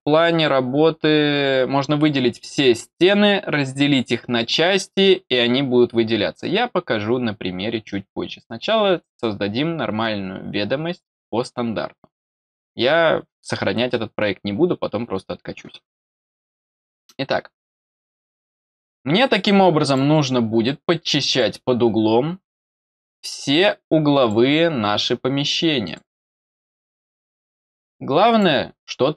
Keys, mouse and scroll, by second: 16.5 middle click, 17.2 middle click, 18.5 middle click, 19.8 click, 21.2 click, 22.5 middle click, 24.1 click, 25.8 click, 26.8 middle click, 28.2 click.